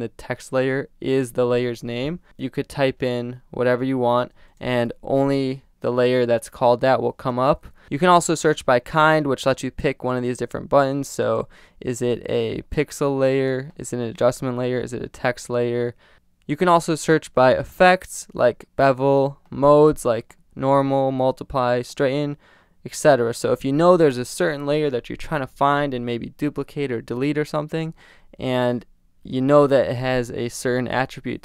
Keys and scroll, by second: 2.0-4.5 typing, 5.9 l, 7.3 BackSpace.